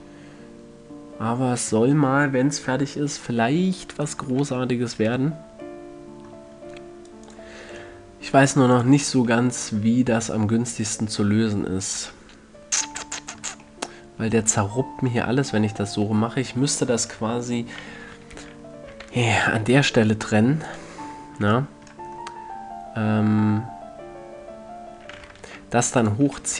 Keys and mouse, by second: 2.4-4.5 middle drag, 4.7 Tab, 5.5 a, 9.1-10.3 drag, 10.3-11.5 middle drag, 13.5-19.4 middle drag, 21.1-22.7 ctrl+drag.